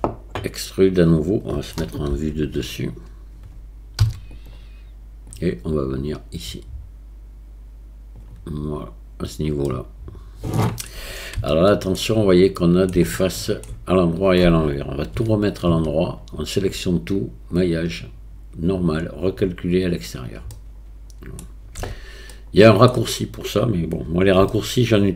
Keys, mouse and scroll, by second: 2.1 KP_7, 4.0 e, 5.4-8.2 drag, 9.7-10.9 middle drag, 11.5 shift+middle click, 12.6 middle click, 13.2 shift+middle click, 15.2 a, 15.7 a, 17.6-20.1 drag, 20.6 middle click, 21.8 Tab, 22.4-22.9 middle drag, 24.5-25.1 shift+middle drag.